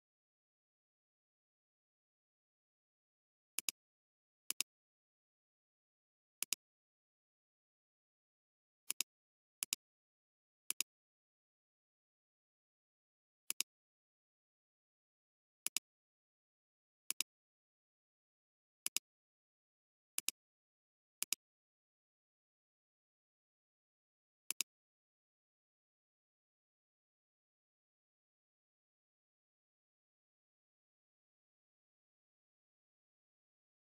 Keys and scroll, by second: 3.0 ctrl+alt+t, 18.8 alt+space, 19.5 alt+space, 20.3 alt+space, 24.5 alt+space.